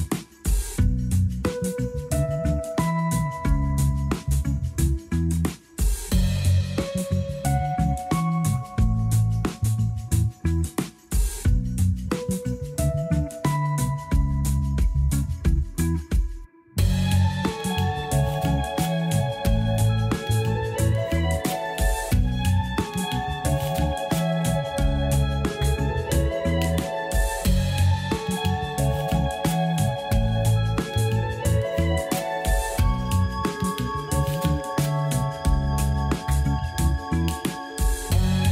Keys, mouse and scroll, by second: 1.4-4.5 drag, 7.0-10.0 drag, 11.5 click, 13.2-16.2 drag, 17.5-20.3 drag, 21.2-23.0 drag, 30.6-31.3 drag, 31.3-31.7 scroll up 1, 31.7-34.7 drag, 36.0-38.5 drag.